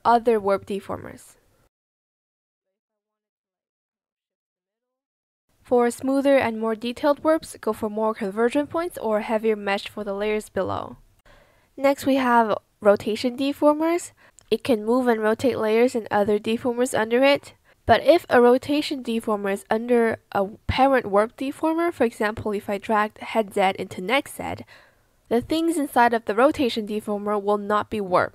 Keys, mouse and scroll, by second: 8.7 ctrl+z, 11.1 ctrl+z, 12.3 ctrl+z, 12.7 ctrl+z, 14.5 ctrl+z, 16.3 ctrl+z.